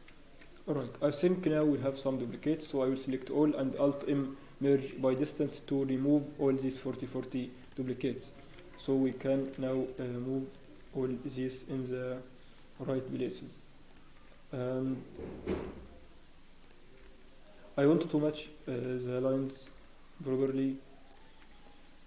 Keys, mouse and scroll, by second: 0.7 click, 1.4 g, 2.5 scroll down 1, 2.6 a, 3.8 alt+m, 6.9 scroll up 1, 7.6 click, 8.4 g, 9.3 click, 9.3 scroll up 2, 9.5 g, 10.5 click, 10.7 g, 12.4 scroll down 1, 12.7 scroll up 1, 13.9 click, 13.9 scroll down 3, 14.1 g, 16.6 click, 16.9 g, 18.1 click, 18.2 g, 19.4 click, 19.6 g, 21.1 click.